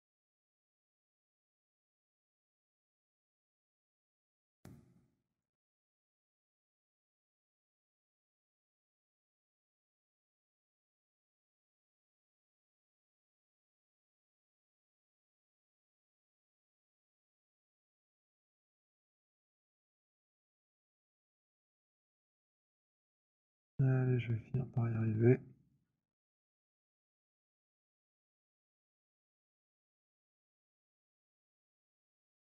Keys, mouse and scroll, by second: 0.6 click, 1.6 click, 4.0 click, 5.2 alt+click, 7.3 click, 10.2 click, 10.4 z, 11.5 click, 14.2 click, 16.0 alt+click, 16.3 click, 19.0 click, 22.6 alt+click, 25.6 click, 26.2 alt+middle click, 29.1 alt+click, 31.3 click.